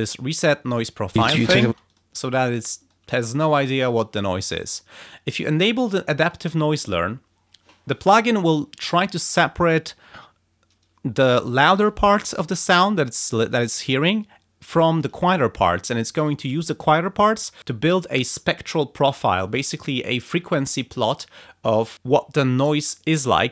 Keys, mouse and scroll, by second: 1.1 space, 1.8 click, 2.5 click, 6.2 click.